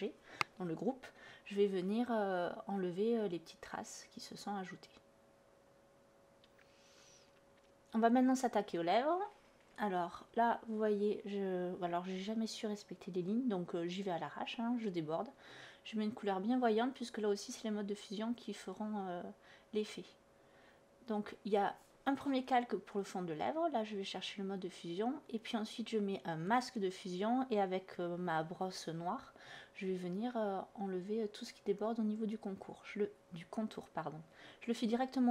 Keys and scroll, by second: 6.5-7.5 typing, 11.7 space, 20.9-21.8 typing, 24.3 b.